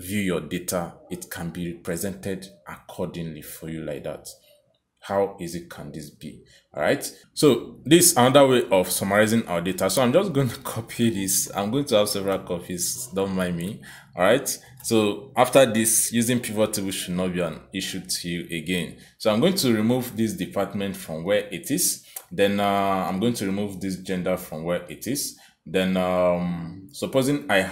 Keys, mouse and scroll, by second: 7.2 click, 8.6 click, 11.5 ctrl+c, 13.4 click, 14.3 ctrl+v, 16.5 Escape, 18.0 click, 20.3 click, 23.5 click, 25.4 click, 25.7 click.